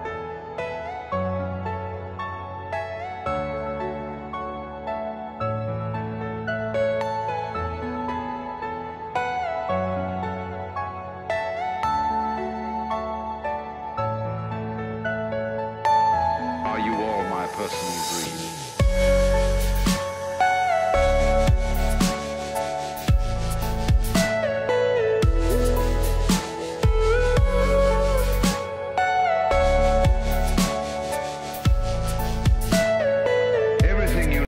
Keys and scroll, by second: 3.3-6.3 typing, 7.4 a, 7.6 r, 7.7 Return, 16.5 e, 17.1 Escape, 19.3 Delete, 25.9 ctrl+r, 30.0 F4, 30.3 F3, 32.0 shift+F2, 32.8 F9.